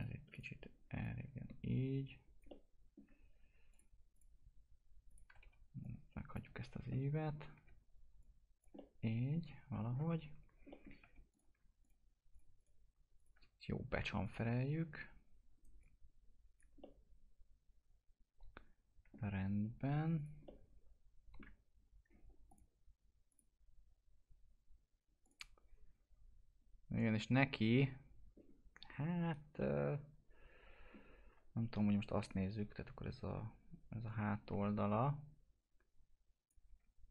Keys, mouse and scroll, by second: 2.7 alt+middle click, 3.7 click, 5.2 e, 5.8 click, 7.5 w, 8.2 click, 8.7-10.4 alt+middle drag, 10.4 scroll up 1, 10.7 alt+middle click, 11.0 2, 11.3 click, 15.5 right click, 15.8 click, 16.8-20.3 alt+middle drag, 20.1 click, 20.3 click, 20.4-22.4 alt+middle drag, 22.4 click, 29.5-31.4 alt+middle drag, 31.4-32.0 scroll down 1, 32.6 1, 34.0 click.